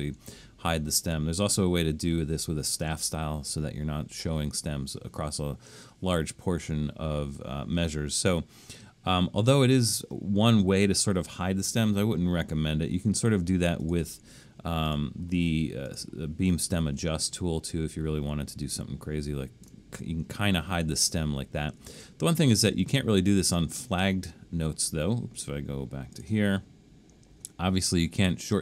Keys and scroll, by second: 21.9 super+z.